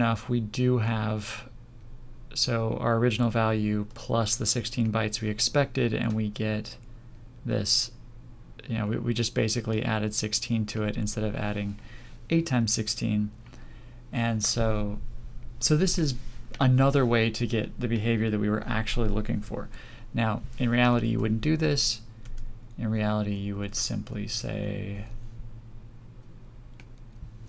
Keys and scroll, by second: 21.0 ctrl+z.